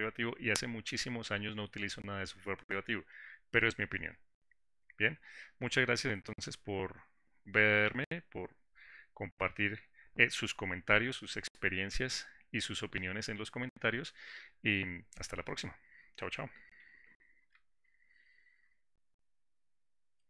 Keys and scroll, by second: 18.7 ctrl+shift+g.